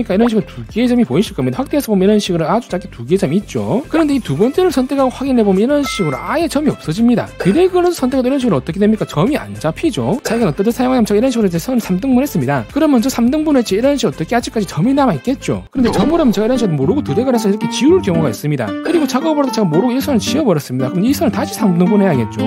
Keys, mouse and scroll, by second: 0.0 click, 0.7 click, 1.1 click, 2.0 scroll down 3, 4.9 click, 5.7 click, 7.5 click, 8.0 click, 8.5 click, 9.0 click, 9.5 click, 10.0 click, 14.0 click, 14.7 click, 16.9 click, 17.6 click, 19.8 e, 20.1 right click, 20.4 click, 21.1 right click.